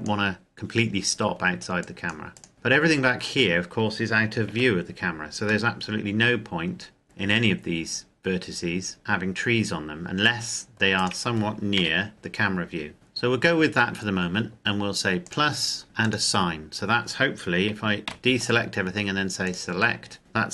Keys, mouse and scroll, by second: 2.1 right click, 2.5 middle click, 4.3 c, 4.7 scroll down 1, 4.9-5.4 scroll up 1, 5.4 middle click, 10.7 right click, 11.5 KP_0, 12.9 z, 15.0 click, 17.9 a, 19.2 click.